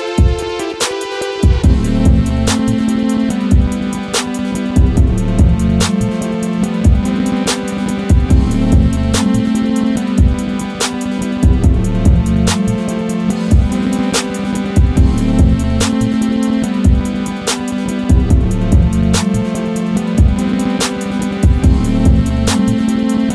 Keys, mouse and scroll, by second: 0.0 click, 1.1 scroll down 1, 1.5 click, 1.9 scroll up 1, 2.3 click, 2.7-3.0 scroll down 1, 3.0 click, 3.3-4.1 scroll down 1, 4.3-4.6 scroll up 1, 4.6 click, 6.0 scroll up 1, 7.0 click, 8.1 scroll down 1, 9.6-13.4 drag, 16.0 click, 18.4 scroll up 1.